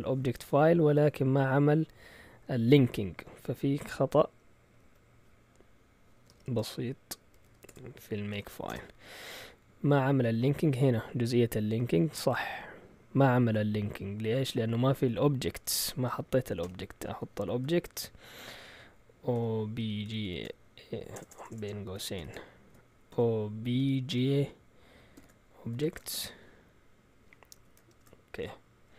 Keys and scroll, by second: 4.2 Up, 4.6 Down, 4.8 Down, 5.9-8.8 typing, 9.3 Down, 9.8-10.6 typing, 14.1-14.5 typing, 16.6 typing, 17.6 typing, 19.1-28.4 typing.